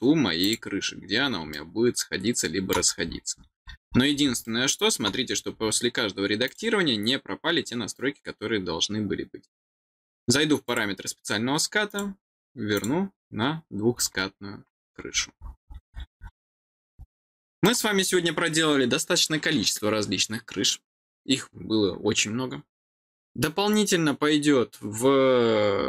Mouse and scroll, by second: 0.3 click, 1.4-2.7 middle drag, 2.8-3.9 scroll down 10, 4.4 middle click, 5.5 middle click, 6.4 click, 10.6 click, 11.8 click, 12.7 click, 14.8-16.2 scroll down 10, 17.0 middle click.